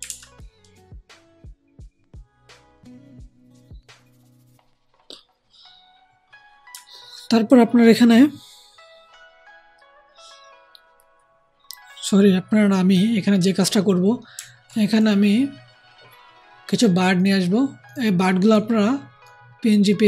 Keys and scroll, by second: 0.0 alt+Tab.